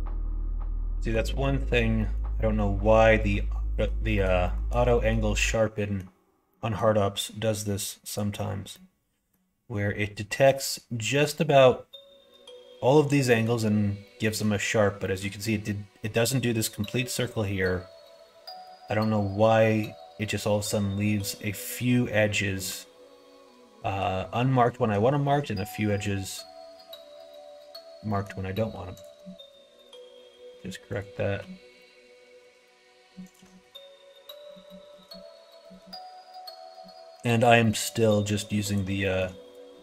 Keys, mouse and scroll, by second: 0.6 middle click, 0.9 middle click, 1.2 middle click, 1.5 middle click, 1.9 middle click, 2.3 middle click, 3.7 middle click, 4.1 shift+middle click, 4.9 middle click, 5.3 middle click, 6.4 middle click, 8.7 middle click, 13.2 middle click, 14.2 middle click, 15.0 middle click, 17.4 middle click, 18.4 middle click, 22.5 middle click, 24.7 middle click, 25.2 middle click, 25.8 middle click, 28.0 middle click, 29.4 q, 30.8 alt+click, 31.5 q, 32.3 q, 33.2 alt+click, 33.5 q, 34.4 middle click, 34.9 middle click, 35.6 middle click, 37.5 middle click, 38.6 click, 38.9 middle click.